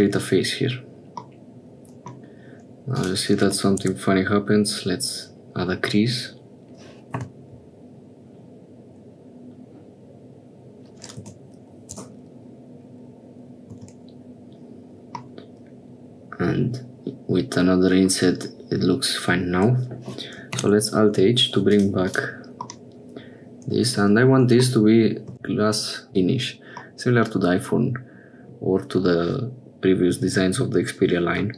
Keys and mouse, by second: 1.3 click, 3.0-4.8 drag, 7.5 i, 14.5 Tab, 15.3-18.1 middle drag, 20.6 alt+h, 21.8 click, 22.1 click, 22.8-24.1 middle drag, 26.9-28.7 middle drag.